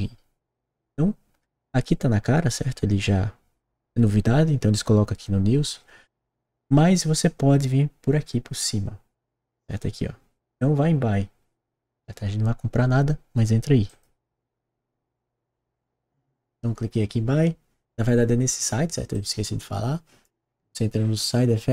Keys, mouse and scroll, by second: 3.2-5.0 scroll down 1, 13.8 click, 19.1-20.6 drag.